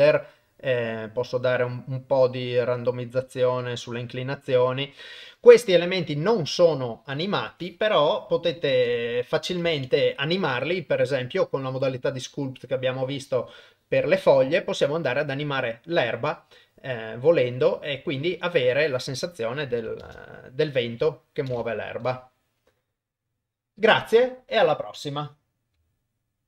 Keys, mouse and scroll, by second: 6.5-7.8 drag, 8.6 shift+Left, 9.7 ctrl+s, 14.2-15.2 drag, 18.6-19.4 drag, 20.0 shift+space, 21.5 shift+space.